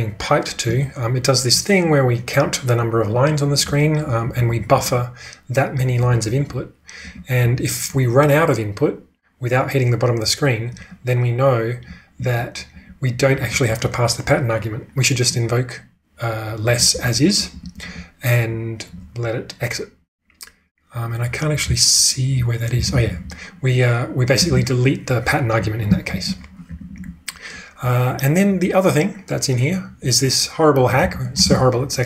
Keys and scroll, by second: 4.2-7.3 typing, 12.1-13.6 typing, 16.8-18.4 typing, 21.6-22.3 typing, 24.4 shift+v, 26.1 ctrl+[, 26.6-28.0 typing, 31.0 k, 31.4 shift+v.